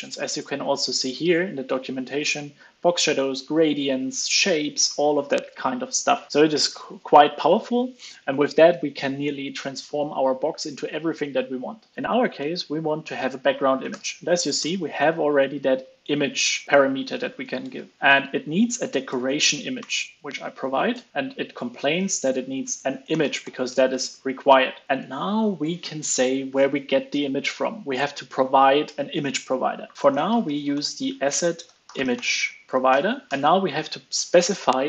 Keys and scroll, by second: 17.5 ctrl+space.